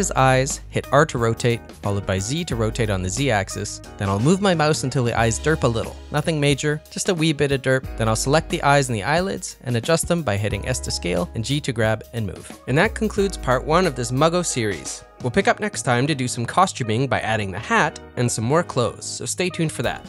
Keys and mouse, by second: 0.5 r, 2.6 middle click, 2.6 KP_1, 3.8 r, 5.9 middle click, 6.7-7.8 middle drag, 8.4 middle click, 8.7 ctrl+middle click, 9.0 middle click, 10.1 KP_1, 10.5 ctrl+middle click, 10.8 click, 11.0 shift+click, 11.2 s, 12.0 g, 12.6 middle click, 13.6 middle click, 13.9 ctrl+middle click, 14.1-17.7 middle drag, 17.6 Tab, 18.5 ctrl+middle click, 19.0 middle click, 19.0 s, 19.6 ctrl+middle click, 19.9 middle click.